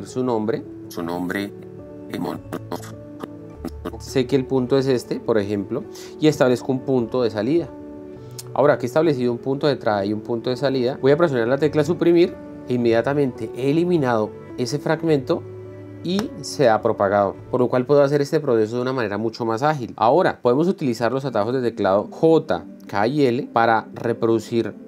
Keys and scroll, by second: 1.3 space, 2.1 Left, 7.1 o, 12.8 Delete.